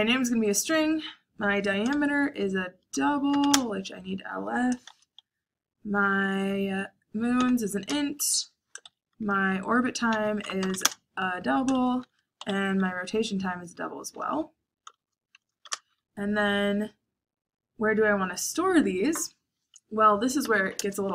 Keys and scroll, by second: 1.9 shift+5, 3.0-4.8 typing, 7.4-7.8 typing, 9.0-12.9 typing, 14.9-15.6 typing, 20.3 BackSpace, 20.7 Return.